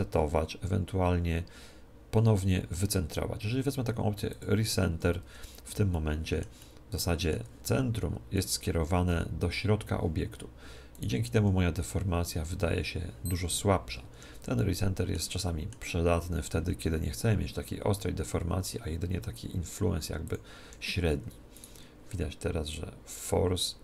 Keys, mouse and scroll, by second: 5.3 Tab, 5.9-8.4 middle drag, 8.4 right click, 9.1 z, 10.5 z, 11.0 right click, 11.4 g, 14.6-17.2 middle drag, 16.2 g, 17.4 g, 20.4 click, 20.6 Escape, 21.6 right click, 21.9 middle click, 22.2 right click, 22.7 middle click, 23.5 click.